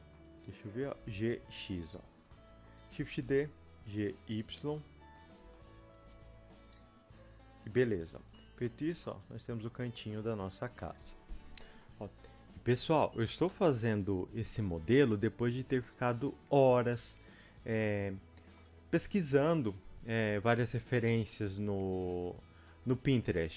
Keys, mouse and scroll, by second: 0.0-7.9 middle drag, 1.0 g, 2.1 scroll down 1, 3.0 shift+d, 5.9 scroll up 1, 6.0 g, 7.9 click, 8.0-8.3 scroll down 1, 8.3-11.3 middle drag, 8.8 Tab, 11.3 Return, 11.3 click, 11.8 middle click, 12.1 Return, 12.1-14.7 drag, 14.7 Tab, 14.7-23.5 middle drag, 15.7 scroll up 1, 19.6-20.0 scroll up 1, 20.7 click, 22.4 scroll up 2.